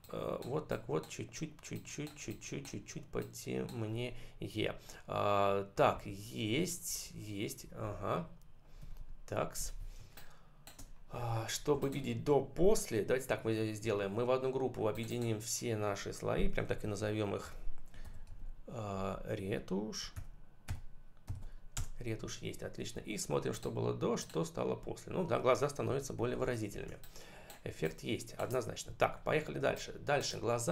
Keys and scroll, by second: 6.0 ctrl+-, 6.7 ctrl+0, 7.5 ctrl+-, 8.7 ctrl+=, 9.9 space, 13.7 ctrl+g, 16.7-18.7 typing, 20.1 shift+e, 20.6 shift+i, 21.2 shift+m, 21.7 Return, 25.9 ctrl+=, 26.7 space, 28.9 ctrl+=, 29.5 space.